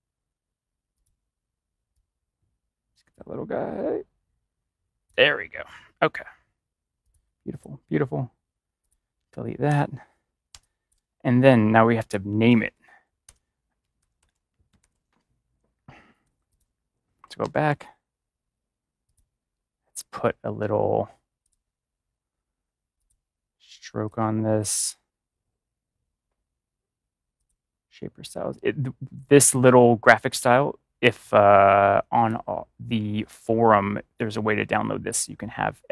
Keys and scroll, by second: 9.6 BackSpace, 13.2 ctrl+BackSpace, 13.9 ctrl+-, 14.7 ctrl+-, 17.3 ctrl+y.